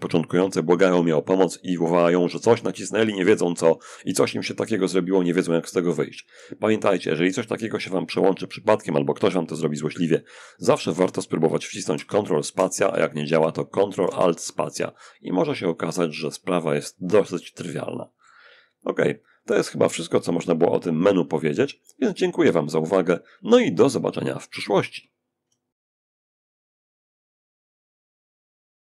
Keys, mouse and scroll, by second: 11.1 ctrl+space, 11.7 ctrl+space, 13.2 ctrl+alt+space, 16.5-18.0 drag, 18.6 click.